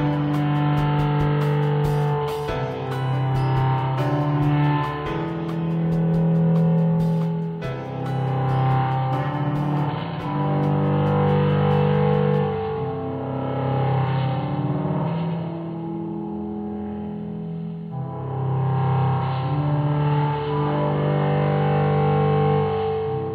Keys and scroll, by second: 1.0 ctrl+z, 3.6 ctrl+alt+z.